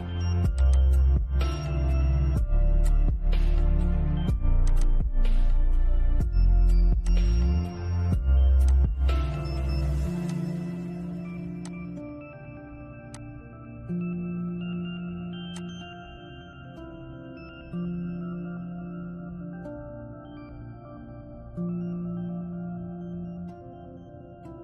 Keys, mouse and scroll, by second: 2.1 click, 6.3 click, 14.7 click, 17.2-17.5 scroll up 1, 18.2-21.9 shift+middle drag, 21.9 ctrl+z.